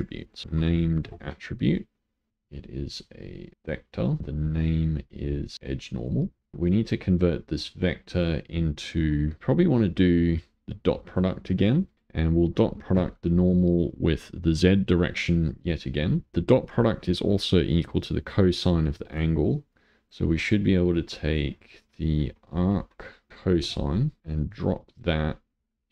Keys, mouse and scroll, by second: 0.2 click, 0.4 ctrl+shift+a, 2.3-6.7 drag, 7.8 click, 10.8 click, 11.9-15.0 drag, 19.1 click, 19.7 click, 20.9 click, 24.6 click.